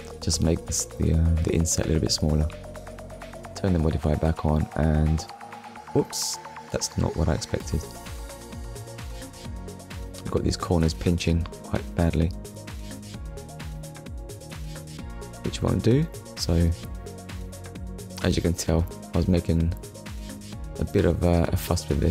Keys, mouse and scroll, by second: 0.1 scroll down 1, 1.7 click, 2.0 middle click, 2.8 Tab, 3.9 click, 5.1 middle click, 7.0 Tab, 7.5 middle click, 9.3 scroll up 1, 10.6 middle click, 11.8 scroll down 1, 12.7 middle click, 14.8 click, 15.3 shift+middle click, 17.6 click, 18.2 click.